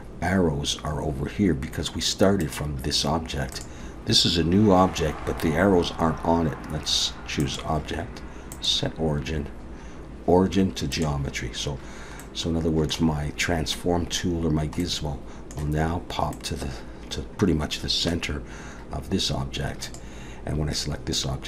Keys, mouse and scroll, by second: 2.4 click, 3.5 click, 7.5 click, 12.2 middle click, 14.8 middle click, 16.3 middle click, 19.8 click.